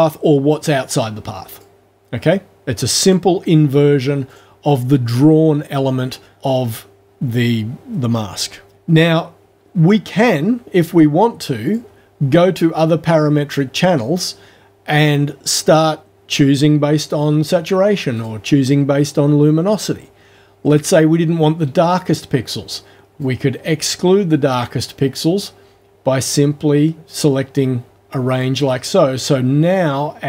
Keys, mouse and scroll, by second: 1.5 click, 3.0 click, 4.3 click, 6.3 click, 11.7 click, 18.2 click, 23.2-28.6 drag.